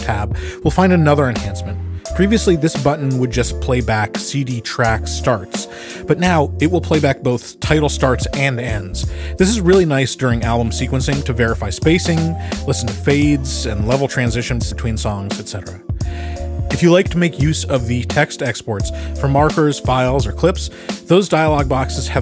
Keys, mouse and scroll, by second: 8.5 click, 12.6 click, 15.2 click, 20.0 click, 21.3 click.